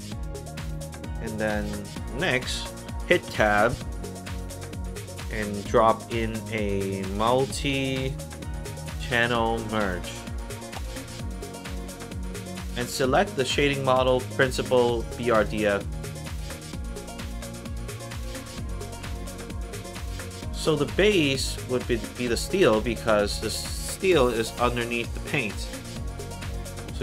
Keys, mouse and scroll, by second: 0.7 click, 3.2 Tab, 6.9-8.5 typing, 8.8 Down, 10.7 Return, 15.9 click, 17.7 click, 19.5 click, 20.2 click, 26.2-27.0 drag.